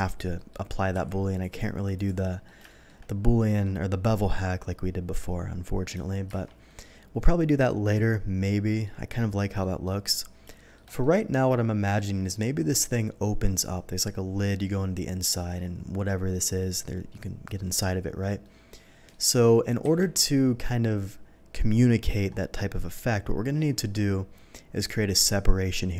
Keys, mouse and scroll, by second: 0.3 middle click, 1.1 q, 1.4 click, 1.9 click, 2.3 middle click, 2.6 shift+middle drag, 3.4 shift+middle click, 6.3 shift+2, 6.6 middle click, 7.4-7.9 middle drag, 8.4-8.8 middle drag, 9.6 middle drag, 10.5 shift+middle drag, 11.0-11.9 shift+middle drag, 12.0 shift+middle drag, 17.5 middle drag, 18.4-19.1 middle drag, 19.8 KP_3, 23.6-24.0 middle drag.